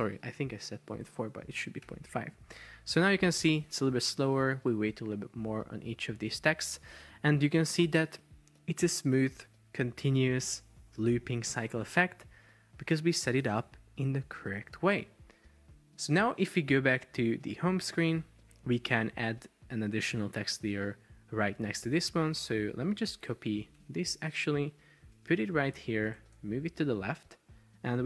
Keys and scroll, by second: 1.9 super+p, 12.8 Escape, 23.8 super+c, 25.3 super+v, 26.3 Left.